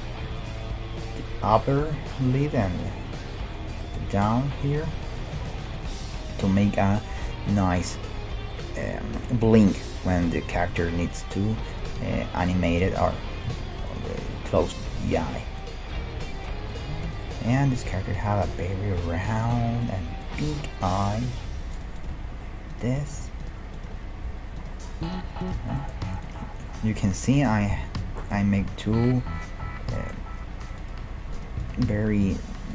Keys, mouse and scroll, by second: 0.2 g, 3.8 middle click, 4.2 click, 4.5-7.2 right drag, 4.5 g, 5.3 g, 11.2-12.9 middle drag, 11.7-17.3 right drag, 12.0 g, 13.2 g, 14.6 g, 15.9 g, 16.7 g, 17.7-28.2 right drag, 17.9 g, 18.6 g, 19.4 g, 20.4 g, 21.5 g, 22.1 g, 23.2 g, 23.9 g, 25.3 g, 25.8-27.6 middle drag, 28.9-30.8 middle drag, 31.1 g, 31.6-32.7 right drag, 31.9 g.